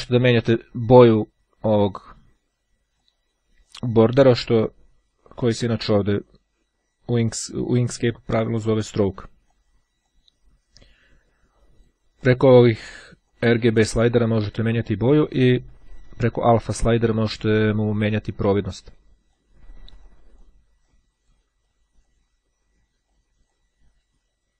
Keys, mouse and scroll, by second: 0.3-1.6 drag, 3.0-5.1 drag, 9.3-10.6 drag, 11.7-12.7 drag, 13.1-14.3 drag, 15.5-19.9 drag, 20.1 click, 21.7 click, 23.1 click.